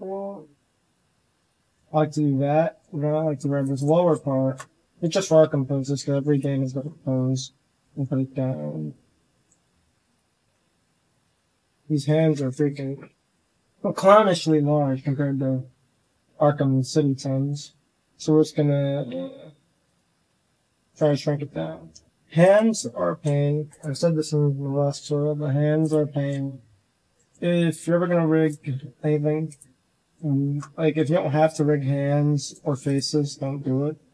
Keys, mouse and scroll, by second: 1.5 z, 1.8 c, 2.8 c, 3.6 click, 4.2 z, 4.3 shift+drag, 4.8 click, 5.3 r, 6.5 shift+click, 6.9-7.3 drag, 7.5 click, 7.8 r, 8.9-9.3 middle drag, 9.3 click, 9.5 r, 10.2 shift+click, 10.7 r, 11.6 middle drag, 12.2 KP_1, 16.1 z, 16.7 c, 16.9 click, 17.6 z, 17.9 s, 18.8 click, 19.0-21.2 typing, 19.7 click, 23.0 s, 26.0 shift+drag, 26.5 g, 27.2 drag, 27.5 middle click, 28.2 shift+click, 28.6 g, 29.7 click, 30.2 shift+click, 30.6 drag, 31.0 click, 31.8 g, 33.2 g.